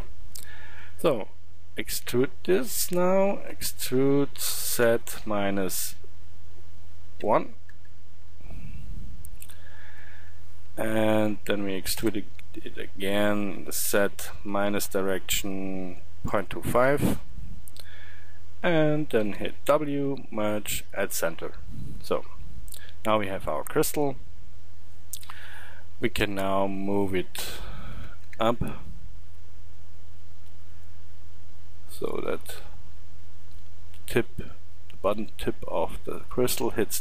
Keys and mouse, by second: 3.6 e, 8.9 middle drag, 12.0 e, 19.2 w, 23.3-23.8 middle drag, 24.0-25.3 middle drag, 25.3 KP_1, 28.3 Tab, 31.2-34.8 middle drag, 34.8-37.0 drag.